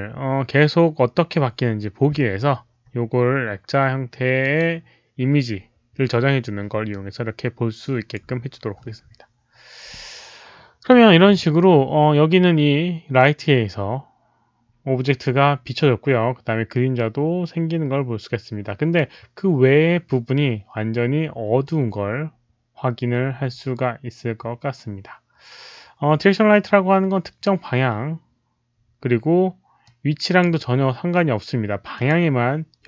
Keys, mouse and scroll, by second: 4.3 click, 6.8-8.1 drag, 29.8 click, 31.9 click.